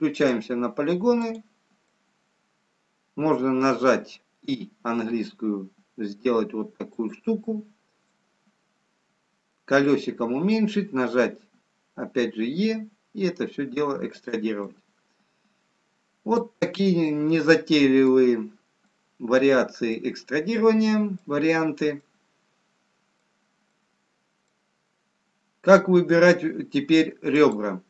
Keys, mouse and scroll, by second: 0.1 click, 1.5 click, 2.3 middle click, 4.5 i, 7.4 middle click, 7.4-8.0 scroll up 1, 8.3-8.6 scroll down 3, 11.2 middle click, 11.2 scroll down 4, 12.4 e, 14.8 middle click, 17.8 middle click, 19.1 middle click, 19.1-19.7 scroll up 4, 20.2-21.0 scroll down 3, 22.8 middle click, 22.8 scroll up 1, 23.8 middle click, 25.7 middle click, 25.7-26.2 scroll up 1, 27.6 click.